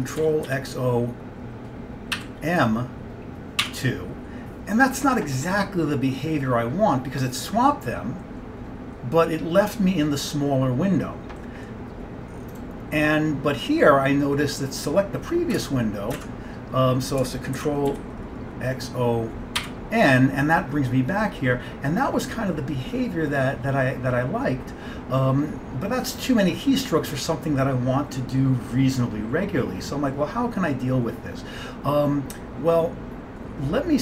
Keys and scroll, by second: 0.3 ctrl+x, 0.5 o, 2.0-3.7 typing, 15.7 alt+Tab, 16.3 alt+Tab, 17.7 alt+Tab, 17.7 ctrl+x, 18.0 o, 19.4-20.2 typing.